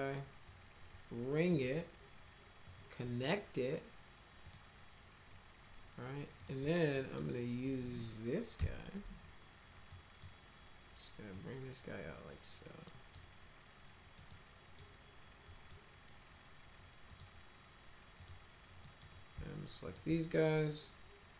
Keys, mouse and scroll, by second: 1.5 click, 2.6 right click, 4.4 click, 6.4 click, 6.9 middle click, 7.9 middle click, 8.6 1, 9.9 click, 11.3-13.1 drag, 13.9 middle click, 14.3 middle click, 15.7 middle click, 17.1 click, 18.2 click, 18.8 middle click, 19.9 ctrl+click.